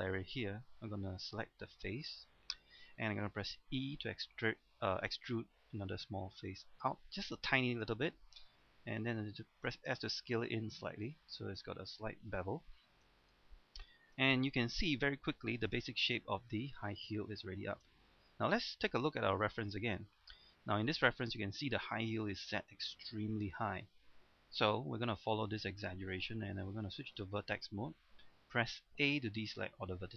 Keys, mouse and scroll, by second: 1.8 ctrl+Tab, 2.0 click, 2.4 right click, 3.8 e, 7.1 click, 7.6 middle click, 9.3 s, 10.2 click, 10.6-12.8 middle drag, 12.8-13.1 scroll down 1, 13.2 shift+middle click, 14.8 KP_3, 15.3-15.6 scroll down 1, 15.8 shift+middle click, 16.3-16.9 scroll up 1, 17.2 shift+scroll up 1, 19.1 click, 20.4-26.3 scroll up 1, 26.5 ctrl+Tab, 27.1 click, 29.0 a.